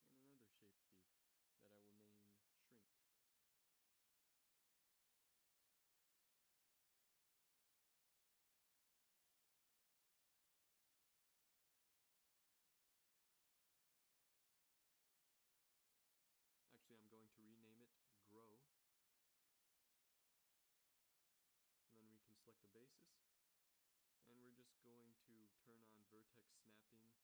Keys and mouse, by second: 18.0-20.1 drag, 22.3-23.3 drag, 23.3 Tab, 24.7 shift+Tab.